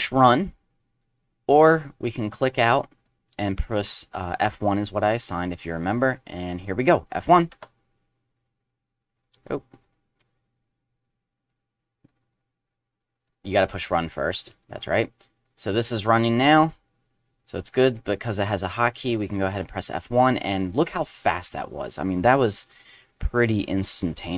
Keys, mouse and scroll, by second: 1.3-1.7 drag, 2.0 click, 2.7 click, 7.5 F1, 11.4 click, 13.2 click, 13.9 click, 17.5 click, 17.9 drag, 19.4 F1.